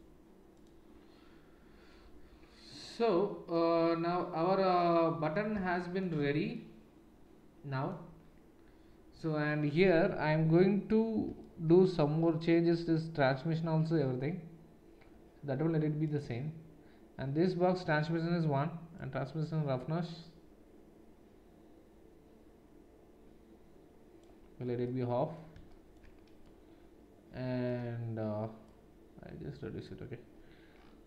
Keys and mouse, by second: 0.0-16.2 drag, 16.2-19.0 middle drag, 19.0-31.0 drag.